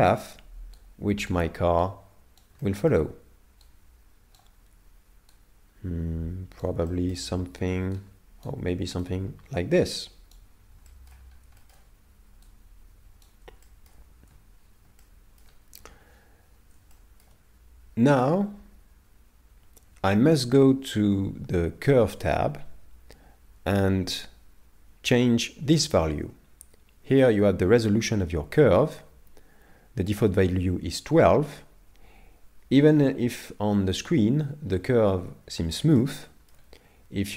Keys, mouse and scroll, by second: 2.6 shift+middle click, 3.7 right click, 5.4 right click, 6.9 shift+middle click, 8.0 right click, 10.9 shift+middle click, 11.2-11.6 scroll down 2, 11.6 shift+middle click, 12.5 middle click, 12.6 right click, 13.6 shift+middle click, 34.7-35.4 scroll up 2, 35.4 scroll down 1, 36.0 shift+middle click, 36.0 scroll down 3.